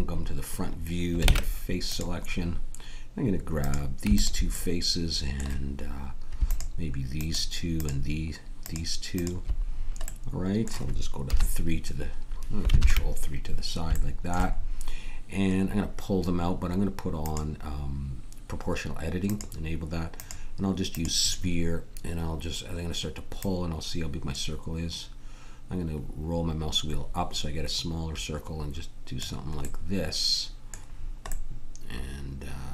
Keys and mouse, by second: 1.2 ctrl+Tab, 5.9 click, 6.5-10.4 drag, 11.2 KP_3, 12.7 ctrl+KP_3, 21.4-25.8 right drag, 25.8-29.5 middle drag.